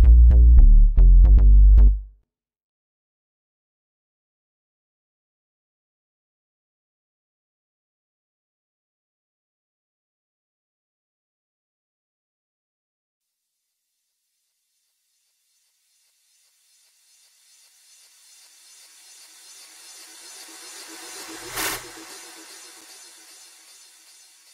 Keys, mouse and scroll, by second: 2.8 F1, 23.0 click.